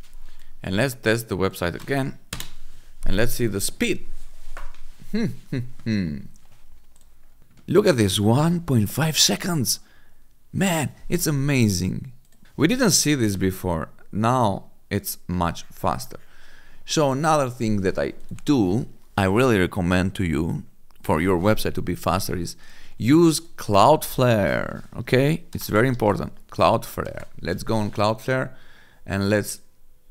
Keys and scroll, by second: 1.6 ctrl+v, 2.2 Return, 24.9-26.6 typing, 27.0 Return.